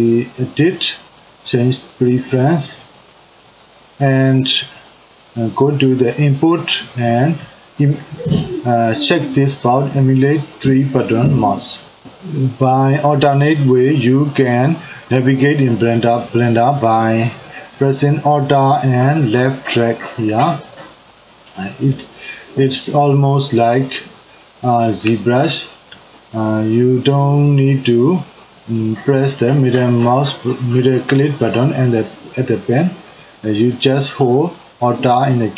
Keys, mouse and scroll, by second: 19.3-30.7 middle drag, 32.0-35.5 middle drag.